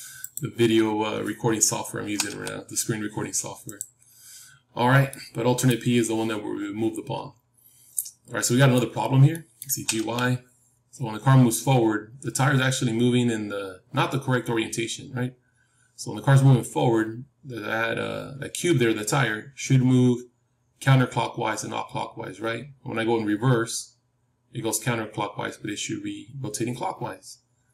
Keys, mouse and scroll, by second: 0.5-2.7 drag, 2.0 g, 3.9-4.3 scroll down 1, 4.3-7.3 middle drag, 7.3-8.1 scroll down 1, 8.1-14.9 middle drag, 9.6 g.